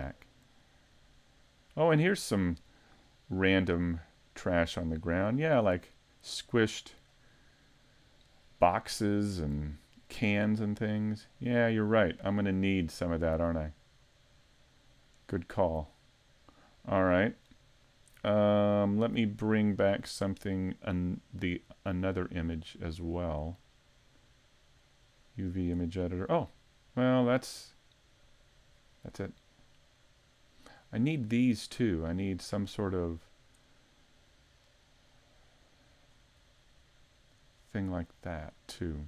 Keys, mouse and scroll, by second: 0.5-1.2 scroll down 2, 1.2 middle click, 1.2-1.9 scroll down 1, 1.9-2.5 scroll up 3, 2.3 middle click, 2.9-3.6 scroll up 1, 3.6 middle click, 3.6 scroll up 1, 4.5-5.2 scroll down 4, 8.7 middle click, 10.4 middle click, 11.9-13.6 scroll up 2, 12.4 middle click, 14.0 middle click, 15.7-16.5 scroll down 1, 16.5 middle click, 16.5-17.1 scroll down 1, 17.1 scroll down 2, 17.5 middle click, 19.9 click, 26.0 middle click, 27.3-27.8 scroll down 2, 27.8-28.2 scroll up 1, 28.2 middle click, 28.8-29.1 scroll up 4, 29.2 middle click, 33.2-33.6 scroll down 2, 33.6 middle click, 35.1 middle click, 36.1 scroll up 2, 36.5 middle click, 38.0 scroll down 2, 38.4 middle click.